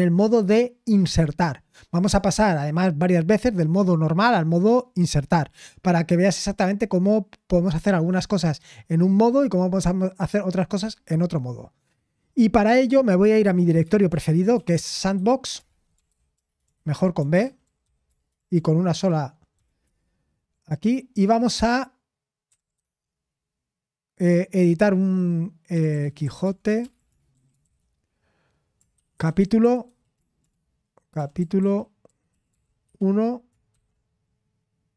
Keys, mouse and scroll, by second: 1.7-3.7 scroll up 1, 14.7-19.9 typing, 22.2-23.3 typing, 26.4-33.7 typing.